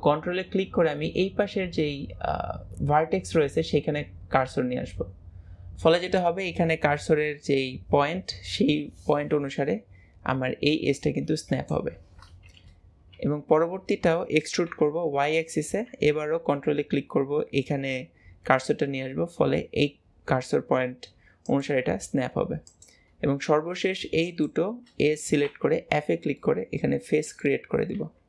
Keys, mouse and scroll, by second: 22.7 click, 24.3 shift+click, 25.5 f, 26.4 middle click.